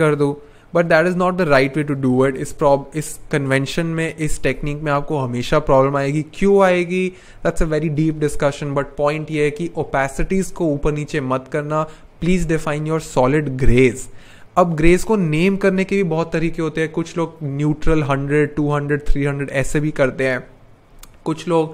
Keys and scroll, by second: 2.4 BackSpace.